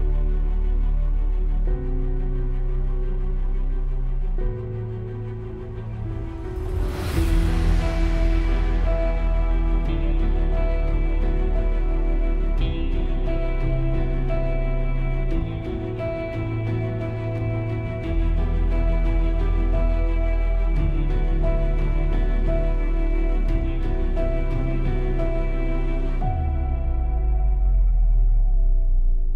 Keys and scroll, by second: 0.9 F8.